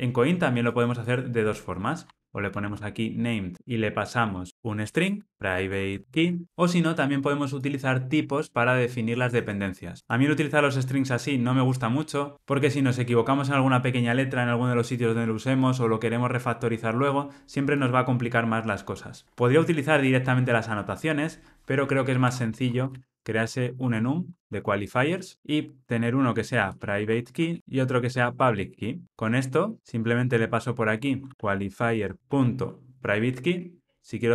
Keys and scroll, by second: 3.5 Return, 23.8 Tab, 27.6 Tab, 32.0 Return, 32.2 super+z, 33.4 Return.